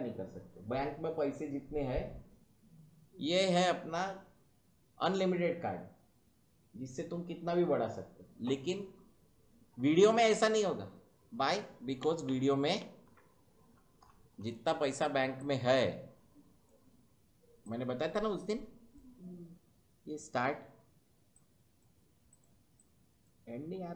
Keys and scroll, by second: 12.3 ctrl+z.